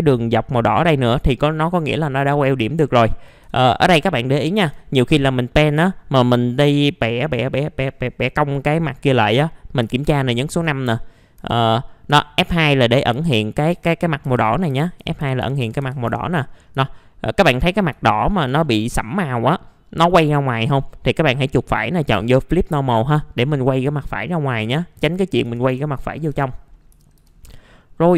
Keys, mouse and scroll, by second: 2.0-2.4 scroll down 1, 2.5 alt+middle click, 3.4 alt+1, 3.6 alt+1, 4.0 scroll down 1, 4.6 F4, 5.0-6.1 middle drag, 10.5 ctrl+a, 11.4 F2, 12.7 scroll up 1, 12.9 scroll down 1, 13.1 F2, 16.5 scroll down 1, 16.8 alt+middle click, 17.6-17.9 scroll up 1, 18.0 alt+middle click, 18.9-20.1 middle drag, 21.1 right click, 22.6 click, 25.4 1, 26.3 F4, 26.7 middle click, 26.9 typing, 27.3 scroll down 1, 27.8 middle click, 28.0-28.1 scroll down 1.